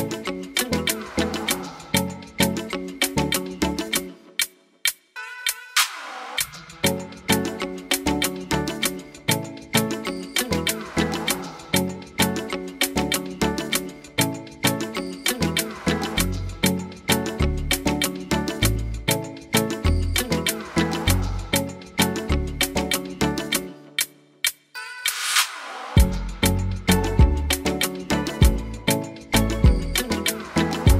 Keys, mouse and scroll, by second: 0.6-1.6 scroll up 8, 1.0 shift+middle click, 1.6 shift+middle click, 2.6 shift+middle click, 2.8-3.3 scroll down 4, 3.0 middle click, 5.6 Tab, 5.7 scroll down 1, 6.3 scroll down 8, 7.1 Tab, 7.1-8.0 scroll up 4, 8.0 scroll up 1, 8.0 g, 9.2 Tab, 9.2 `, 10.2-10.5 scroll down 9, 10.5 click, 10.9 middle click, 13.4 middle click, 13.4 click, 13.4 scroll down 3, 13.5 b, 14.8 middle click, 16.2 shift+click, 16.7 middle click, 17.5 shift+click, 18.0 middle click, 19.8 click, 20.0 click, 20.7 b, 21.7 middle click, 24.1 x, 24.9 scroll up 5, 25.1 middle click, 25.5 click, 25.9 Tab, 26.2 click, 26.6 h, 26.9 scroll up 1, 26.9 middle click, 27.2 Tab, 27.6 click, 27.7 Tab, 28.1 shift+middle click, 29.1 click, 29.6 shift+middle click, 30.3 click, 30.7 scroll up 2.